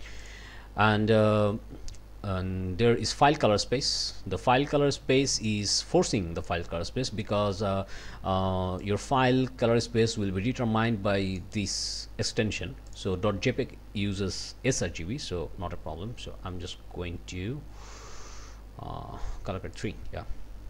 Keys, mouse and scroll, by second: 0.2 click, 5.4 click, 6.4 click, 8.8-11.6 drag, 12.9 click, 16.7-17.4 scroll down 2, 17.8-18.3 scroll down 2, 19.8 click.